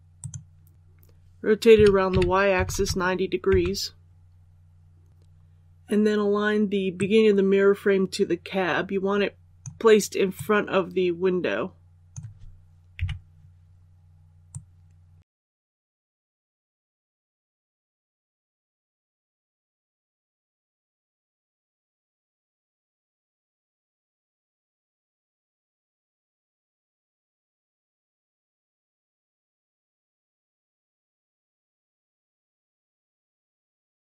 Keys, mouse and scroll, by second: 0.1 click, 0.7 ctrl+z, 1.7-2.5 typing, 6.9-12.9 drag, 12.9 KP_3, 14.4-17.0 drag, 17.2 scroll up 1, 17.9 shift+middle click, 19.5-22.0 drag, 22.5 s, 24.8-27.0 drag, 27.0 s, 29.5-33.0 drag, 33.1 scroll up 1.